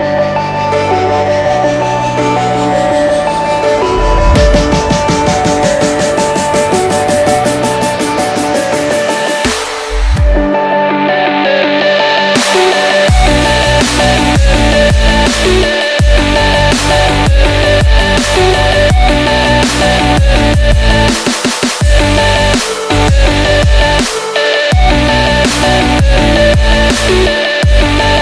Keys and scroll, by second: 1.7 ctrl+t, 6.2 ctrl+t, 15.4 ctrl+t.